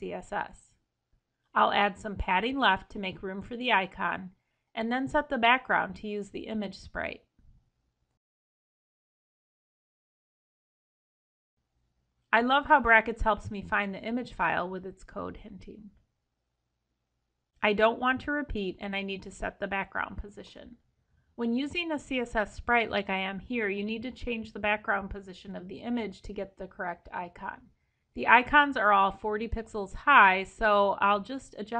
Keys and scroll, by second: 0.7 ctrl+e, 2.1 alt+Down, 3.6 ctrl+Return, 27.1 ctrl+shift+o.